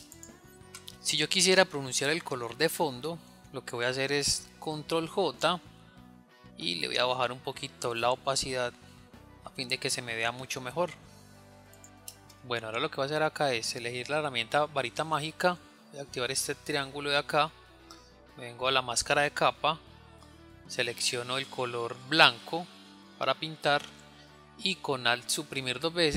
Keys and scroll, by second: 5.4 ctrl+j, 24.8 alt+Delete.